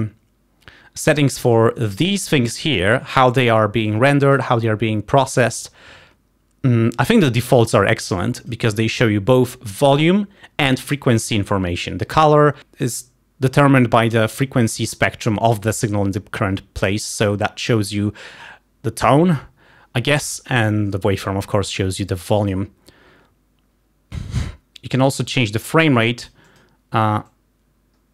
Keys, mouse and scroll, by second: 1.3 click, 3.9 click, 7.3-8.8 drag, 22.3 click, 26.1 click, 27.7 click.